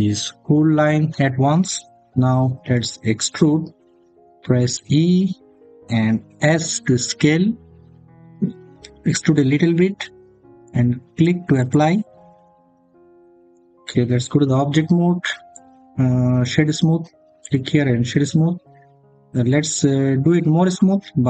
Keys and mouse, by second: 4.6 e, 6.2 s, 11.4 click, 12.2 middle click, 14.3 Tab, 15.3 click, 16.1-18.2 drag.